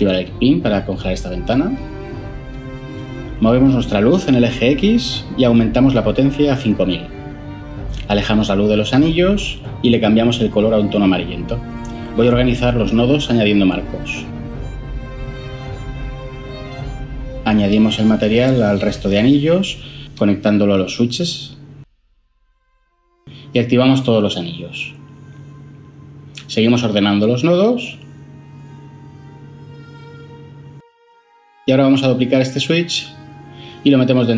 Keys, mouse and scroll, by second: 7.0 BackSpace, 7.6 Return, 7.6 5, 13.6 ctrl+j, 13.7 F2, 14.0 typing, 14.3 Return, 31.7 shift+d.